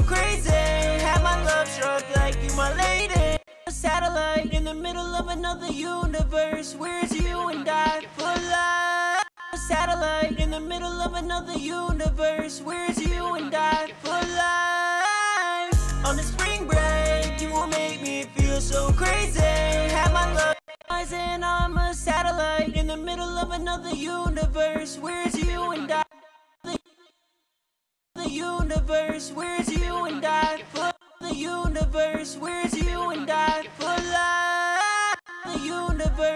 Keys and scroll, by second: 2.6 space, 2.8 space, 10.8 typing, 19.9 ctrl+space, 26.1 space.